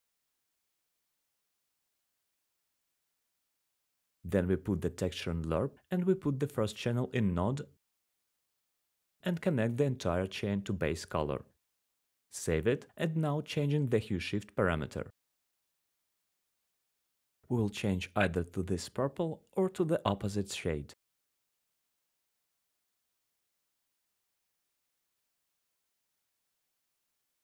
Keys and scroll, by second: 0.1 1, 1.0 1, 7.7 typing, 8.3 Return.